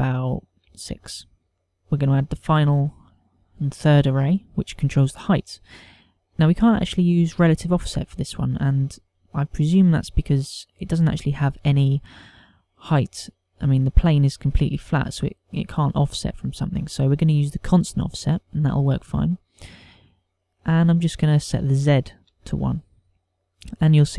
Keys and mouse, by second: 1.8 middle click, 4.1 click, 9.5 click, 10.4 click, 20.9 click.